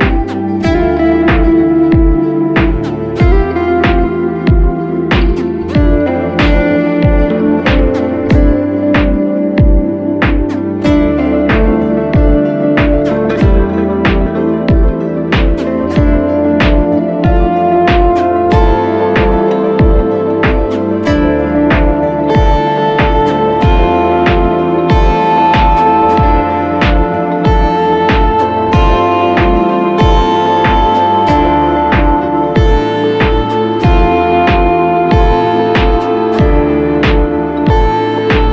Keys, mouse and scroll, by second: 5.7-6.6 typing, 11.4-12.2 typing, 13.9 double click, 16.8 double click, 23.0 double click, 29.9-32.4 scroll down 1, 34.1-34.6 ], 35.7 typing, 37.7 double click.